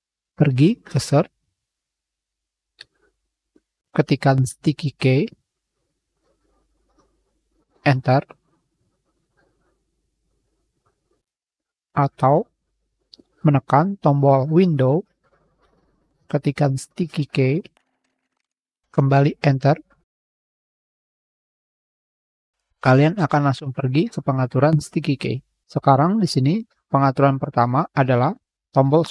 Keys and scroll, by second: 23.0 h.